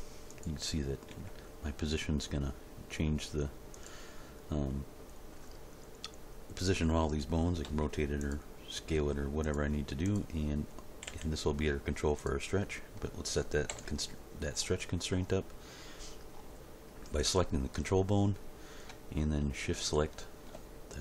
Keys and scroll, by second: 1.1 g, 7.6 r, 8.9 s, 11.0 g, 13.7 End.